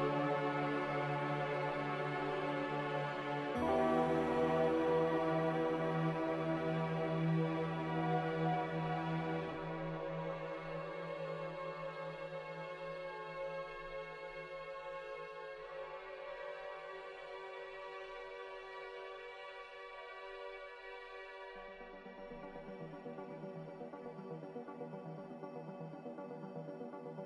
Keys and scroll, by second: 8.6 q, 17.6 q, 18.6 q, 20.6 m.